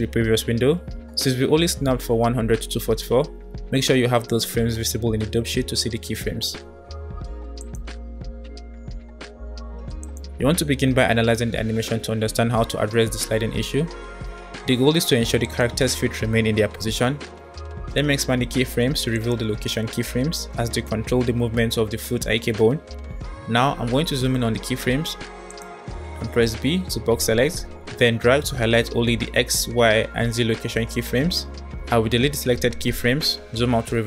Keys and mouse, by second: 4.7-5.2 middle drag, 5.8-6.3 middle drag, 6.7 middle drag, 7.4 click, 10.0-13.4 drag, 15.5-18.3 drag, 19.2 click, 21.4-23.5 drag, 25.1 click, 26.5 b, 32.1 Delete.